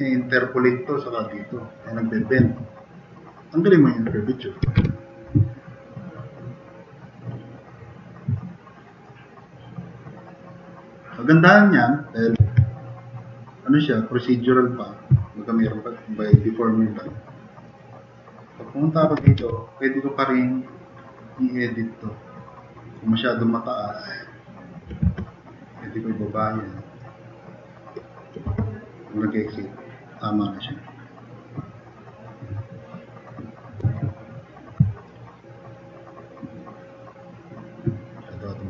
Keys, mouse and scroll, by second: 4.6 0, 4.8 Return, 12.4-14.4 drag, 15.2 middle click, 15.2 scroll up 2, 16.5 click, 19.0-19.8 typing, 21.2 drag, 25.0 e, 26.5 click, 28.5 4, 35.6 click, 36.7-37.2 middle drag, 37.3-37.7 middle drag.